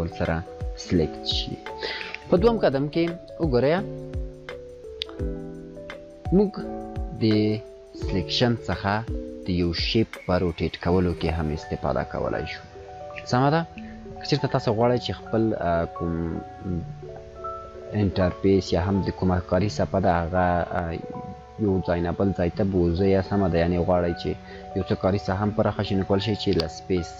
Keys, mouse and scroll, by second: 2.4-3.1 drag, 8.6 click, 11.3 click, 11.6-12.3 space, 14.8 space, 15.0 click, 15.3-19.2 space, 17.5 space, 17.5 space, 20.6 space, 21.0 space.